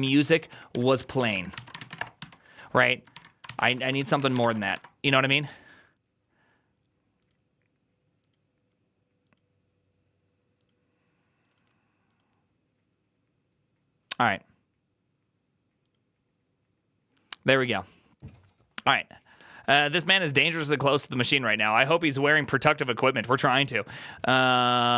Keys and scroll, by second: 0.0-5.0 typing.